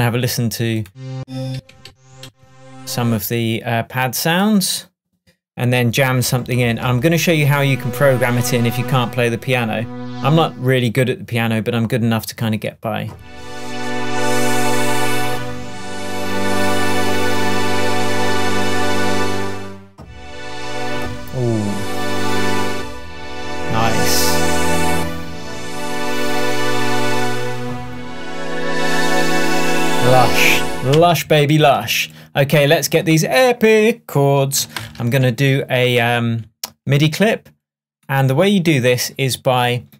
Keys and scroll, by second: 1.2 Down, 31.0 space, 34.8 shift+super+m.